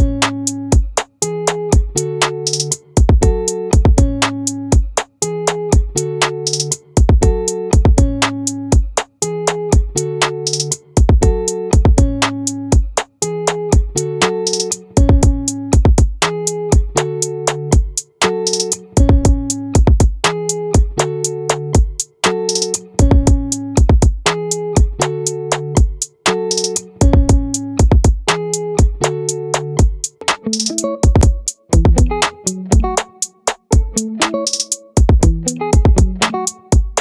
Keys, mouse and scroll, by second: 6.5-8.1 middle drag, 8.1 click, 22.5 ctrl+r, 33.2-35.1 drag.